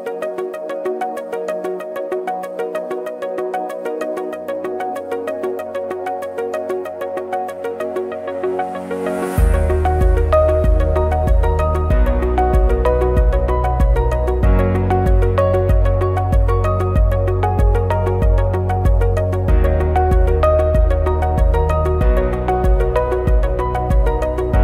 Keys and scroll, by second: 7.2 ctrl+=, 9.6 ctrl+c, 9.7 ctrl+f, 14.7 ctrl+=, 14.8 ctrl+-, 15.8 ctrl+=, 16.6 ctrl+shift+a, 19.2 Delete, 23.5 ctrl+shift+a.